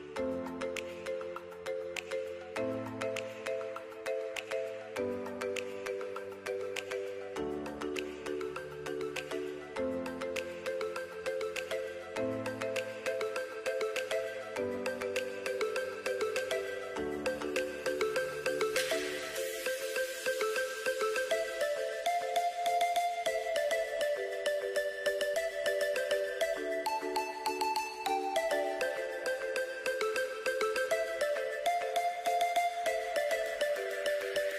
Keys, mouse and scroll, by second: 7.4 shift+click, 8.4 click, 10.5 click, 11.9 click, 15.6 click, 23.3 shift+click, 25.0 click, 27.2 click, 29.8 click.